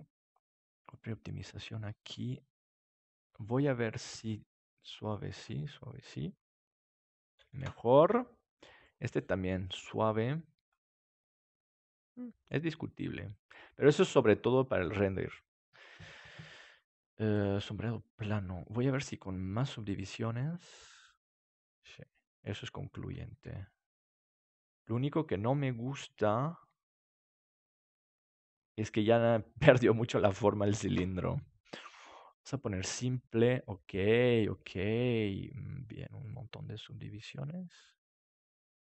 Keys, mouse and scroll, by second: 0.9-2.5 drag, 2.5-3.5 middle drag, 3.8-6.5 drag, 7.5 ctrl+s, 8.8-13.6 drag, 9.9 right click, 17.3-19.1 drag, 19.8-21.7 drag, 21.2-22.4 middle drag, 23.4 s, 27.7-29.6 drag, 29.6-30.8 middle drag, 30.8 ctrl+s, 32.5-34.3 drag, 33.4-38.8 middle drag, 36.2-38.8 drag.